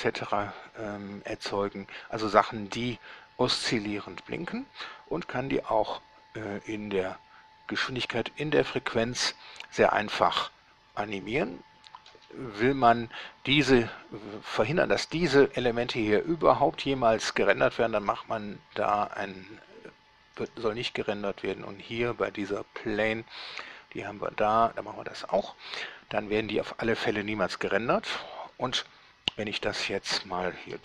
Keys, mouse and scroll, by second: 12.4 Escape, 15.4 right click, 16.5 scroll down 1, 18.2 click, 20.7 middle click, 23.8 scroll down 1, 25.6 click.